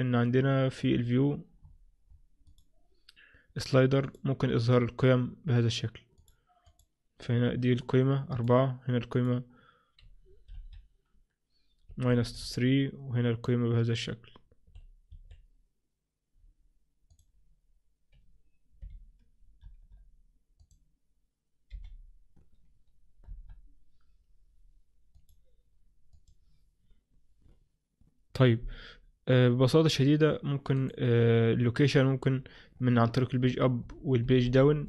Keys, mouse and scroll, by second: 0.1-0.8 scroll down 1, 0.8-1.7 scroll down 2, 1.1-1.7 scroll up 2, 1.9-2.6 scroll up 10, 4.9 click, 4.9-5.4 scroll down 1, 5.4 scroll down 1, 6.3 click, 6.8 click, 9.2 click, 10.6 Left, 12.0 Right, 12.5-14.7 Right, 14.8 Right, 15.2 Right, 17.2 click, 20.7 click, 29.9-30.8 scroll down 1, 30.8 click, 33.5 Page_Down, 33.9 Page_Down, 34.3 Page_Up, 34.5 Page_Up.